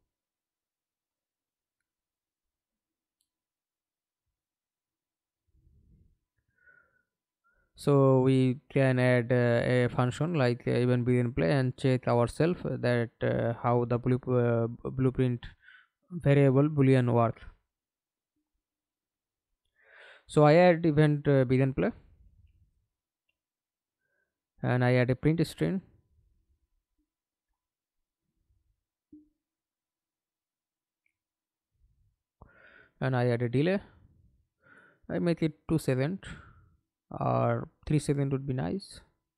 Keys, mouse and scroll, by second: 3.4 scroll down 2, 4.9-6.2 scroll up 1, 12.5 right click, 13.8 Delete, 15.2 scroll up 1, 15.4 right click, 16.1-18.8 typing, 19.6 Return, 20.4-21.6 scroll up 3, 22.2-22.5 scroll up 3, 22.5 right click, 23.0-25.3 scroll up 2, 25.9-27.4 typing, 27.8 Return, 29.6 right click, 31.4 d, 35.8 ctrl+a, 36.3 ctrl+a, 36.6 Return, 37.7 right click.